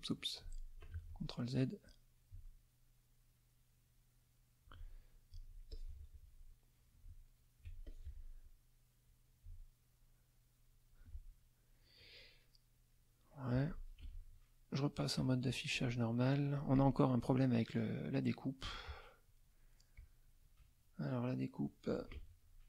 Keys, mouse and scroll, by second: 0.0 click, 0.9 ctrl+z, 1.8-4.8 drag, 5.7 alt+click, 6.9 alt+click, 7.8 alt+click, 9.0-11.1 drag, 12.4 middle click, 14.0 ctrl+KP_5, 15.0 middle click, 15.7 click, 16.5 click, 17.1 click, 19.9 click, 22.1 F1.